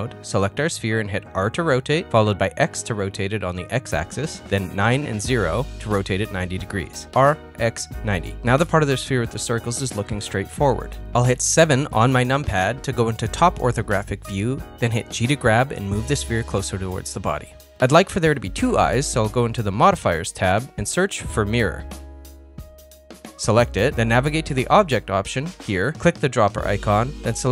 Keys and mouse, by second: 0.4 r, 4.3 middle click, 5.8 Tab, 7.6 Tab, 8.2 ctrl+middle click, 10.4 KP_1, 11.0 KP_7, 14.9 shift+middle click, 15.4 g, 19.8 KP_1, 21.7-23.9 drag.